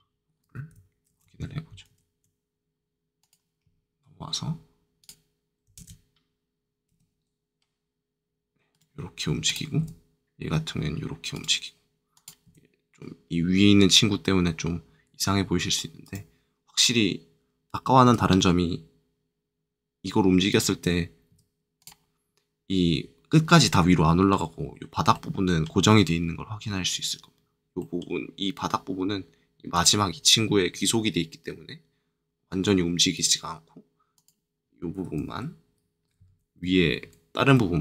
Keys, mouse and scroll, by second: 1.0 ctrl+Tab, 1.8 ctrl+Tab, 3.2 click, 5.0 click, 5.7 ctrl+Tab, 6.9 r, 8.7 right click, 9.4 click, 9.7 r, 11.3 right click, 12.1 click, 12.4 r, 16.0 right click, 18.0 r, 20.4 right click, 21.2 r, 21.7 click, 23.6 middle click, 25.1 middle click, 29.7 click, 30.7 r, 33.1 right click, 34.1 click, 36.2 ctrl+z.